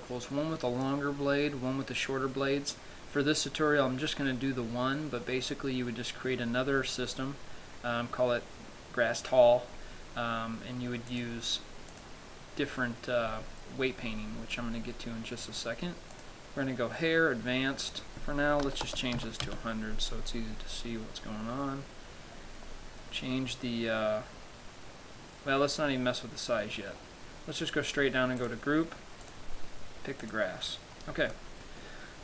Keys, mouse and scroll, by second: 11.4 click, 13.2 scroll down 2, 14.3-14.9 scroll down 3, 14.9-15.3 scroll up 5, 15.6 scroll down 1, 16.4 click, 19.8 click, 21.5-22.3 scroll down 2, 22.3-24.6 scroll down 8, 24.6-25.5 scroll down 1, 27.5-28.0 scroll down 10, 28.6 scroll down 3, 28.7 click, 29.5 click, 31.3-32.2 scroll up 3, 31.6 middle click.